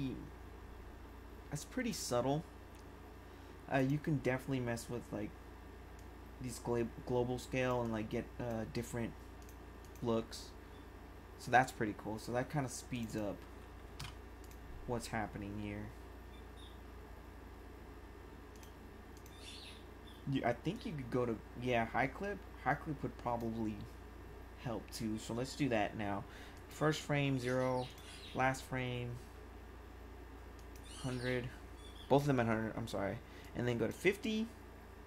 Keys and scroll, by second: 13.6-14.4 typing.